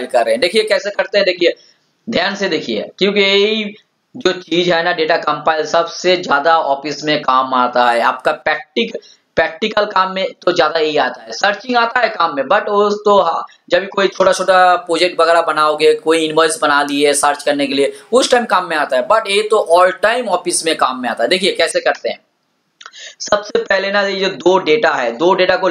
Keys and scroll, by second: 0.7 alt+Tab.